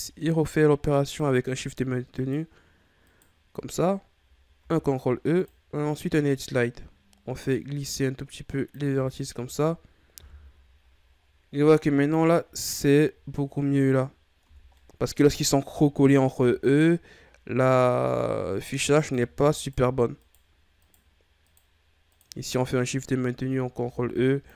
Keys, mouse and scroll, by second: 0.3 shift+right click, 1.0 shift+right click, 1.5 shift+right click, 2.1 shift+right click, 3.0 shift+right click, 4.5 ctrl+e, 8.9 Tab, 9.3-10.1 scroll down 4, 10.1 KP_1, 11.0-11.7 scroll down 9, 12.2 middle click, 12.7-13.8 scroll up 14, 14.4-14.7 scroll down 3, 14.7-15.9 middle drag, 15.9-17.9 ctrl+scroll up 8, 18.9 right click, 19.5 shift+right click, 20.1 shift+right click, 20.7 shift+right click, 21.4 shift+right click, 22.1 shift+right click, 23.7 ctrl+e.